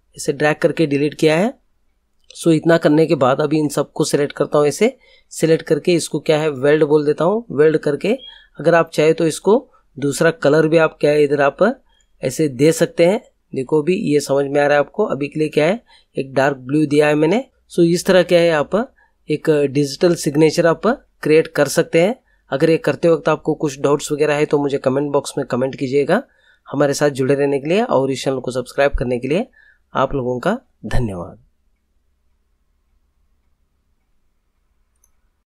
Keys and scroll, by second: 0.4 Delete.